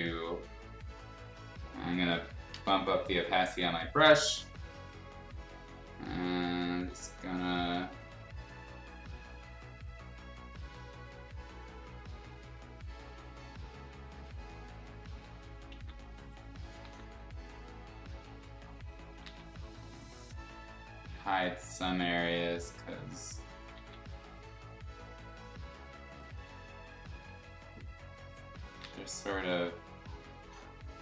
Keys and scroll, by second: 2.5 8, 6.1 ctrl+z, 15.7 ctrl+z, 16.8 ctrl+z, 19.2 ctrl+z, 23.7 ctrl+z, 28.8 ctrl+z.